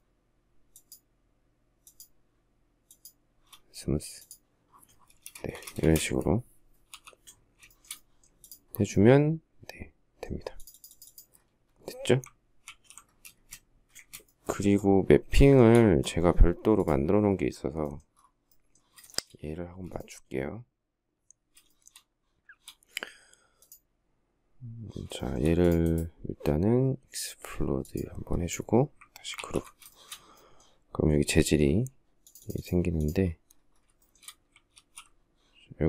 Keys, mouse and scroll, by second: 0.4 shift+click, 1.4 shift+click, 2.5 shift+click, 4.7 space, 4.8 Escape, 5.2 Escape, 6.5 k, 7.3 shift+middle click, 12.3 alt+f, 12.9 space, 13.0 Escape, 13.6 Escape, 15.0 shift+middle click, 18.7 shift+middle click, 19.3 space, 21.3 shift+middle click, 24.8 shift+middle click, 29.0 ctrl+g, 29.2 ctrl+scroll down 1, 29.6 shift+middle click, 33.6 shift+scroll, 33.7 shift+middle click, 34.3 alt+f.